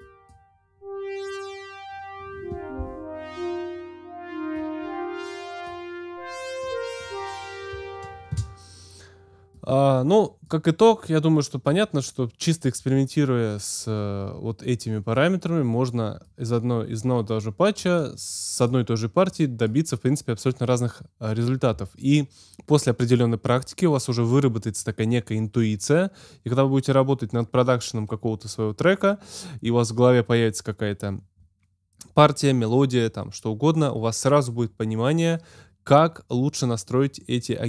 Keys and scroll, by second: 8.3 space.